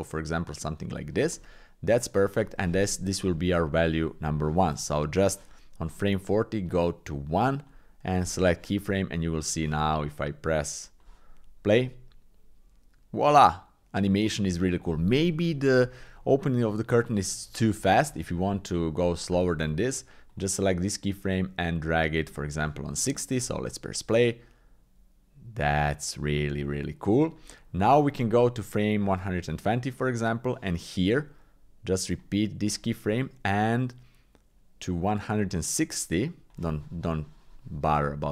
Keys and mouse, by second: 1.4 Tab, 6.7-7.7 drag, 8.2 click, 10.1 click, 11.8 click, 17.2 click, 20.3 click, 21.0-22.6 drag, 23.4 click, 27.4-30.2 drag, 32.1 click, 33.6-36.5 drag.